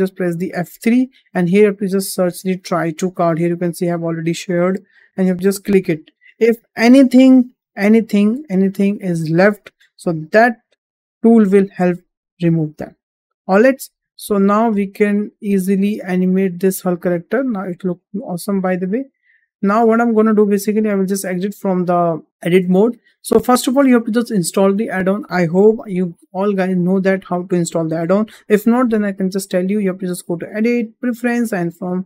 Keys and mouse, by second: 0.6 F3, 13.5 click, 14.2 middle click, 15.3-17.4 middle drag, 18.0 shift+middle click, 20.6 Tab, 21.4 shift+middle drag, 23.1-23.6 shift+middle drag, 30.2-31.3 drag.